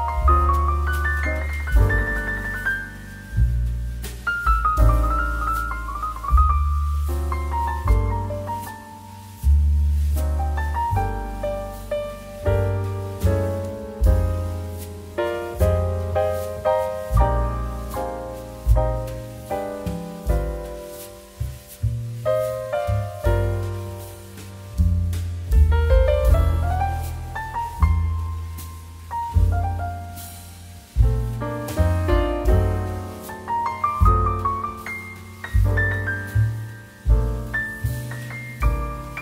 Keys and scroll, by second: 6.0 2, 13.7 ctrl+Down, 15.4 ctrl+KP_0, 20.4 2, 23.1 z, 27.4 x, 28.7 x, 35.7 ctrl+KP_0.